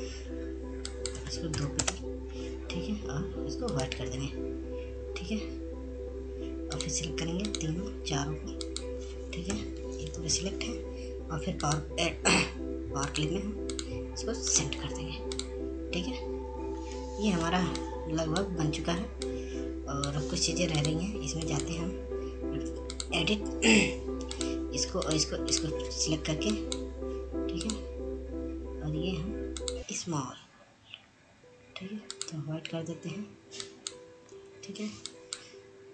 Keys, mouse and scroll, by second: 4.6 right click, 7.7 shift+click, 10.5 Delete, 11.2 ctrl+z, 12.7 click, 17.6-18.2 scroll down 1, 18.5 F2, 18.9 click, 19.9 F2, 20.4 click, 20.4-22.6 drag, 22.6-24.1 right drag, 24.1-30.4 drag, 30.7 click, 33.2-35.9 drag.